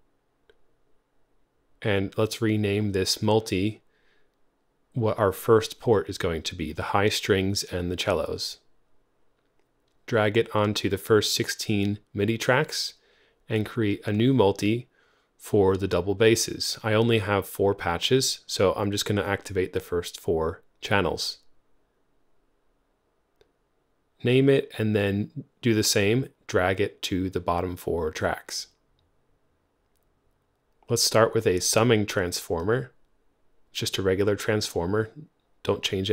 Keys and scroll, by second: 1.0-4.8 typing, 4.8 Return, 19.7-21.0 typing, 33.1-34.1 typing.